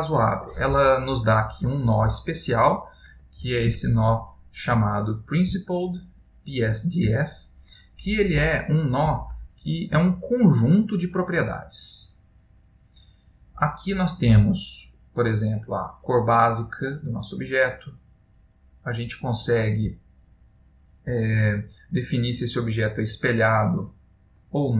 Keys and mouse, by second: 2.9 click, 4.0 ctrl+middle click, 5.0 middle click, 5.8 ctrl+middle click, 7.7 middle click, 9.3 ctrl+middle click, 14.0 middle click, 15.7 click, 22.8 click.